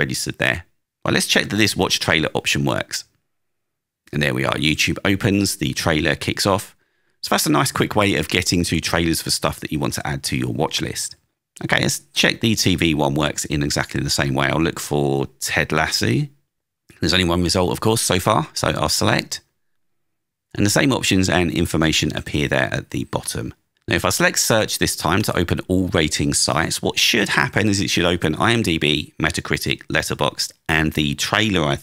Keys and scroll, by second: 0.8 Down, 2.3 Return, 7.2 super+w, 9.4 alt+space, 13.3 space, 15.0 space, 18.6 Return, 27.8 Down, 30.3 Down.